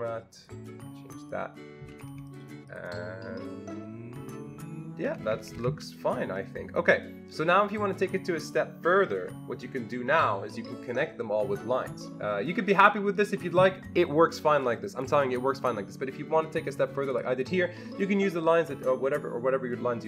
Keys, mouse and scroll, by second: 0.4 ctrl+double click, 1.2 click, 1.9 Escape, 2.1 Escape, 2.3 click, 2.7 click, 5.0 Escape, 5.2 Escape, 5.4 Escape, 5.5 Escape, 17.1 click.